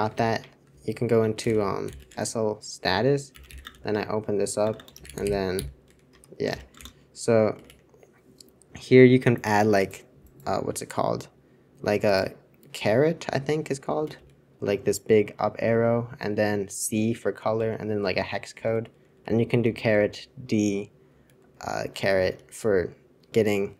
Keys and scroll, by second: 0.2 super+3, 0.4 super+Return, 0.6-8.3 typing, 19.5-20.0 typing, 21.1-22.2 typing.